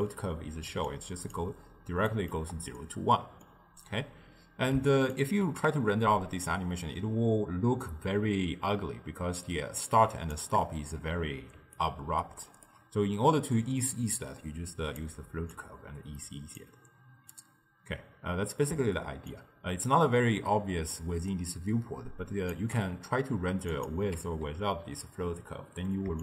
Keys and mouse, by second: 0.8 d, 1.0-1.4 drag, 1.4-2.1 d, 2.2 click, 2.4 d, 2.5 d, 2.8-5.2 middle drag, 5.2-8.3 shift+drag, 11.6 d, 11.8 right click, 12.8 d, 14.2-18.6 drag, 19.3-22.5 shift+drag, 23.8 click, 24.2 m, 24.5 m, 25.0 m, 25.3 m.